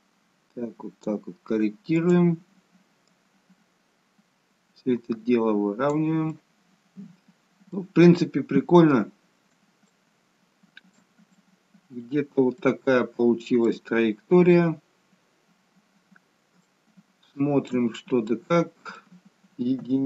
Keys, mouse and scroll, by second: 1.9 click, 6.3 middle click, 8.3-9.3 scroll up 2, 9.9 shift+middle click, 11.2 middle click, 12.6 shift+middle click, 14.0-14.3 scroll up 1, 14.3 scroll down 1, 14.6 scroll up 2, 14.8-15.5 scroll down 2, 16.5 scroll down 1, 16.6 shift+middle click, 18.1-18.9 scroll up 1, 18.9 middle click, 19.9 KP_1.